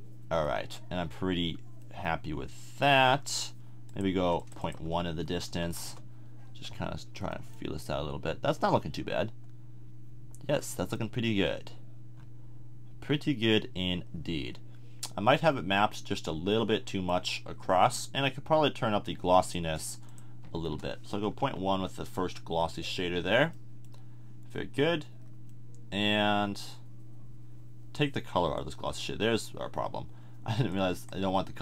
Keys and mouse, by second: 7.2 middle click, 9.3-10.6 middle drag, 10.7-12.4 middle drag, 12.7-16.6 middle drag, 20.7 BackSpace, 28.6-30.7 drag.